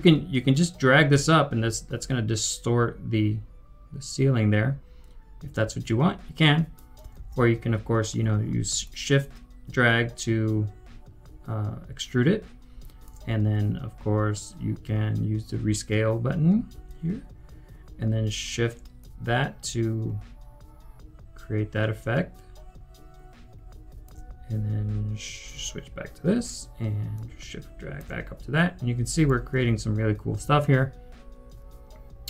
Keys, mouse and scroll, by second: 7.1 ctrl+z, 8.8 shift+click, 16.2-16.7 typing, 18.9 shift+click, 25.5 typing, 27.1 shift+click, 29.2 right click, 29.6-30.9 typing.